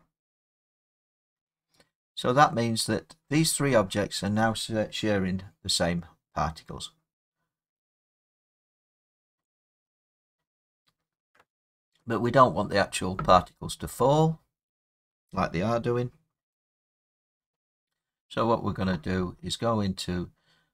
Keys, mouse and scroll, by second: 2.7 middle click, 13.5 middle click, 13.5 middle click, 13.6 middle click, 14.5 scroll down 3, 14.7-16.4 scroll up 1, 17.2-17.7 scroll up 3.